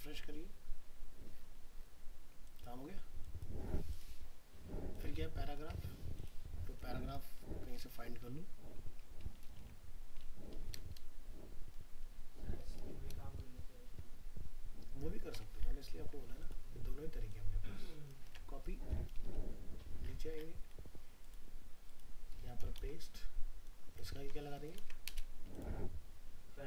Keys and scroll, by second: 5.6 alt+Tab, 8.9 ctrl+Home, 9.6 ctrl+f, 18.3 ctrl+c, 19.2 ctrl+End, 22.8 ctrl+v, 24.2 ctrl+c, 24.8 ctrl+v.